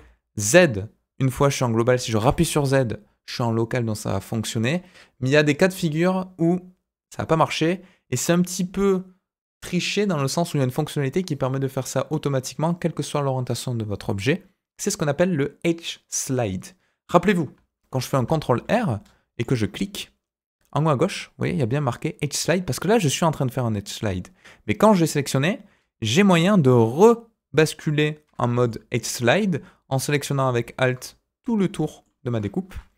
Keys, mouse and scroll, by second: 18.1 ctrl+r, 28.6 alt+click, 29.3 middle click, 31.8 middle click, 32.6 KP_1.